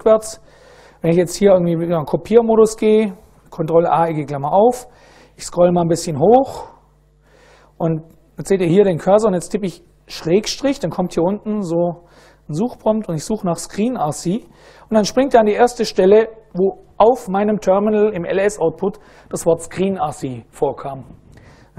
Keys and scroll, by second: 0.7 super+Right, 2.4 ctrl+a, 2.9 [, 5.1 Up, 5.4 Up, 6.2 Up, 7.9 Down, 8.2 Down, 8.5 Down, 9.2 Left, 9.5 Left, 10.9 /, 12.7-15.5 typing.